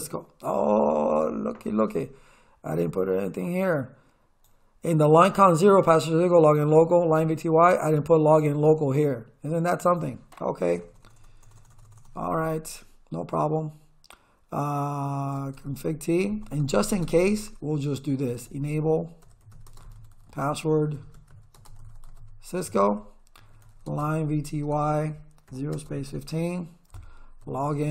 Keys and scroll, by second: 10.8 BackSpace, 15.4-27.9 typing.